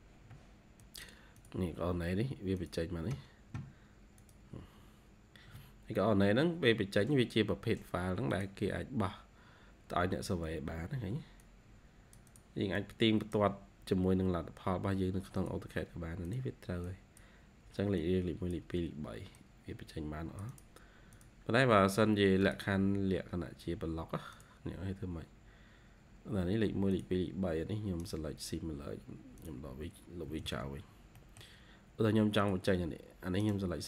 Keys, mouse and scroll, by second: 0.3 ctrl+q, 10.0-10.5 scroll up 3, 12.6 double click, 25.0 scroll up 1, 25.8-26.9 scroll up 2, 27.9 right click, 30.2-31.0 typing, 30.8 scroll down 1, 31.3 middle click, 31.8-32.1 scroll up 1, 33.3 right click.